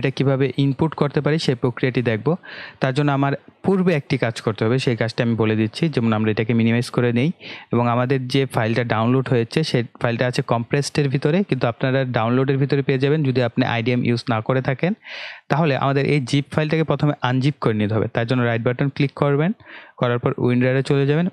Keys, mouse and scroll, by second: 6.3 click, 15.3 click.